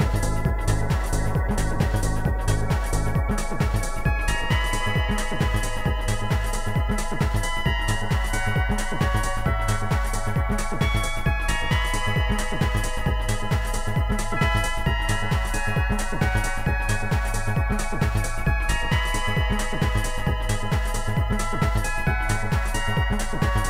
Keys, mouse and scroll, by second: 0.2 click, 1.3 click, 2.1 click, 2.4 click, 2.9 click, 5.1 click, 7.2 click, 7.6 click, 9.4 click, 9.5 click, 9.9 ctrl+z, 9.9 click, 10.9 click, 11.9 ctrl+z, 12.7 click, 14.0 click, 15.2 click, 15.2 click, 16.5 click, 17.4 click, 18.7 click, 19.5 click, 20.4 click, 21.6 click, 23.1 click.